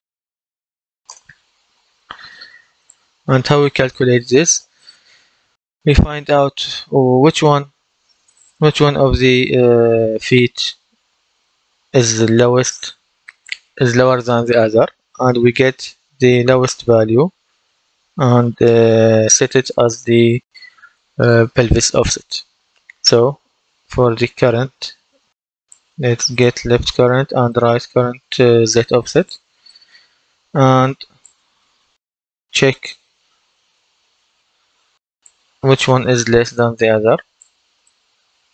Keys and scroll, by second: 0.0-0.5 typing, 1.0 Return, 33.9 shift+,.